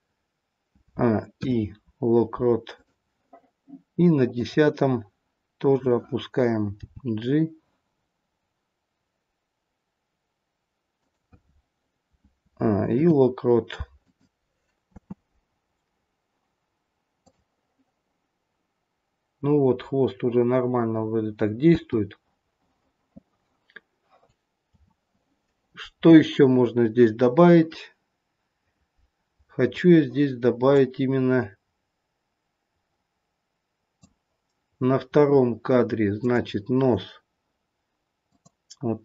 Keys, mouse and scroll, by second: 0.7 a, 1.3 i, 4.3 click, 5.7 click, 7.0 g, 12.4 a, 13.0 i, 14.9 space, 17.3 click, 21.7 space, 24.8 a, 26.5-27.7 scroll up 4, 27.7 scroll up 2, 30.7 click, 34.8-35.3 scroll up 2, 36.2 click, 38.3 click.